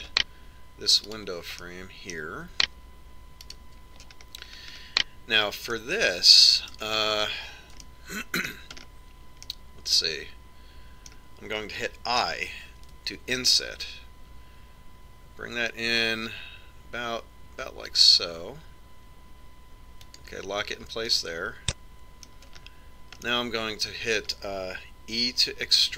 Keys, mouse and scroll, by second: 0.1-1.9 right drag, 0.7-1.9 drag, 1.9 middle click, 2.6-4.3 right drag, 3.0-4.8 middle drag, 5.0-6.8 right drag, 5.8 middle click, 7.2-9.0 middle drag, 9.3-12.9 middle drag, 14.3 i, 22.7-25.9 middle drag.